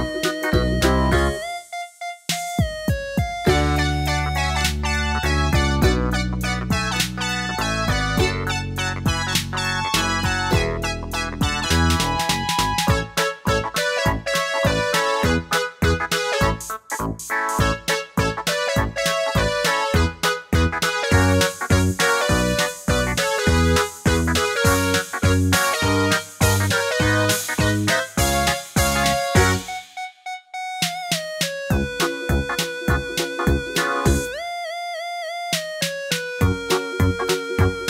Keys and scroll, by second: 7.5 super+d, 21.4 super+d, 30.5 super+d, 33.1 super+d.